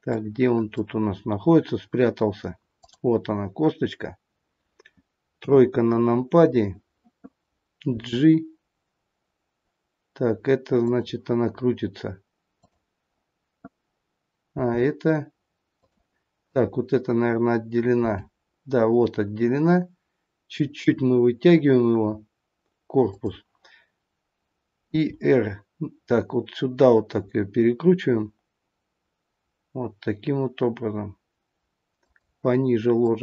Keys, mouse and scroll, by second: 0.1 middle click, 1.2-2.7 scroll up 4, 2.7 click, 2.7-3.9 scroll up 2, 5.2 KP_3, 5.9-7.4 scroll down 5, 7.9 g, 12.5 click, 14.4 g, 16.3 click, 17.9 g, 24.9 r, 33.0 click.